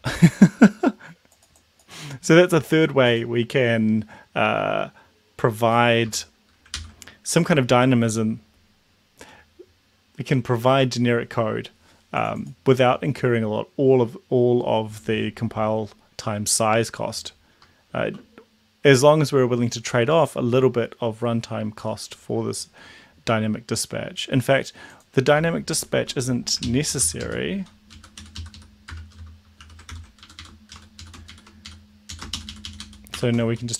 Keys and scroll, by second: 6.1 BackSpace, 6.8 ctrl+s, 26.6 ctrl+shift+Left, 27.0 ctrl+x, 27.2 Down, 28.0 Down, 28.2 End, 28.4 Left, 28.6 Left, 28.9 BackSpace, 29.6 shift+7, 29.9 ctrl+v, 30.3 Up, 30.4 Up, 30.8 shift+Down, 31.3 shift+Up, 32.1 Down, 32.3 shift+Up, 33.1 shift+Home.